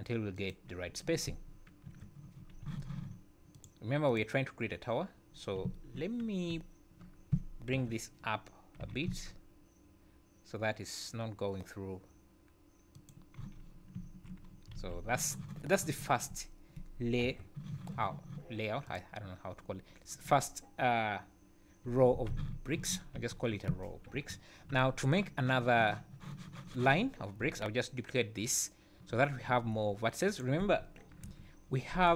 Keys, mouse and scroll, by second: 1.9 KP_1, 2.4 scroll up 2, 2.6 z, 3.6 click, 4.1 click, 5.7 `, 7.7 KP_1, 8.8 g, 13.4 z, 14.0 `, 14.5 scroll down 4, 14.8 alt+a, 17.2 KP_7, 18.9 click, 19.9-20.2 scroll up 2, 21.9 Tab, 22.3 z, 22.8 1, 23.2 a, 24.1 KP_1, 24.6 scroll up 2, 30.3 click, 30.7-31.2 scroll down 5, 31.2 KP_7, 31.6 scroll up 4.